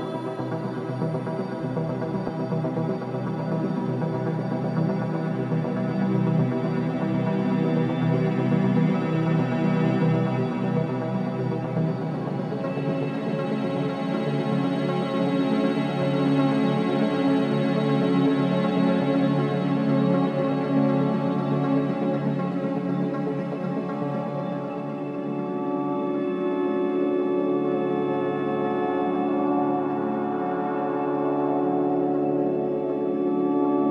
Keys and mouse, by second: 0.1 Tab, 1.0 BackSpace, 1.6 BackSpace, 2.9 BackSpace, 3.5 BackSpace, 4.6 Left, 4.9 Left, 6.4 Left, 7.3 BackSpace, 7.8 BackSpace, 7.9-8.4 BackSpace, 8.6 BackSpace, 8.7 Tab, 10.7-14.1 drag, 14.6 shift+Caps_Lock, 16.0-18.3 shift+drag, 18.5 click, 21.9 shift+d, 22.9 Return, 23.9 Tab, 24.9 Left, 25.1 Left, 25.3 Left, 25.5 Left, 26.5 BackSpace, 27.0 BackSpace, 28.4 Tab, 30.4-33.9 drag.